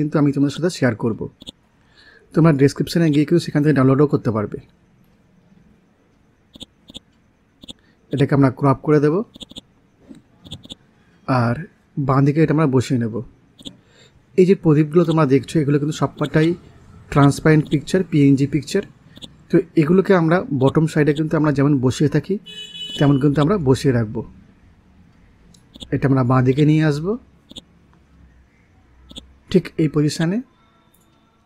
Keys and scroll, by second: 18.7 ctrl+z.